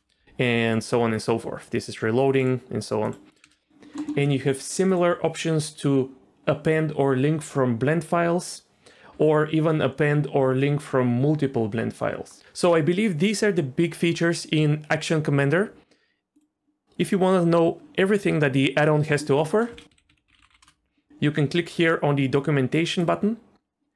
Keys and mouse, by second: 0.6 click, 3.3 click, 3.4 space, 3.7 drag, 4.8-12.4 drag, 16.4 click.